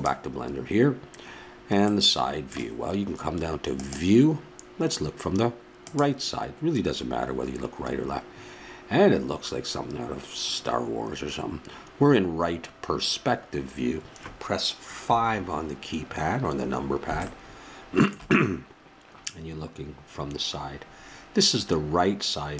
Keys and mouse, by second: 15.0 KP_5.